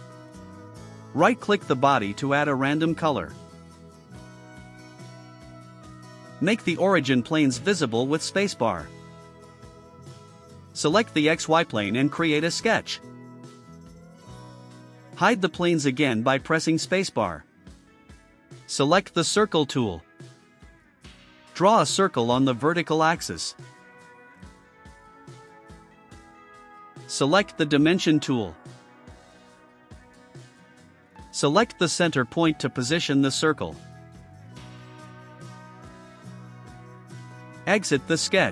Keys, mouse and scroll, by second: 1.5 right click, 3.0 click, 3.3 click, 7.5 click, 8.1 space, 9.1 click, 10.7 click, 13.4 click, 15.2 click, 16.2 space, 20.3 click, 21.7 click, 23.7 1, 23.9 1, 25.3 Return, 31.9 click, 33.0 click, 33.8 1, 34.3 0, 35.1 5, 35.6 Return.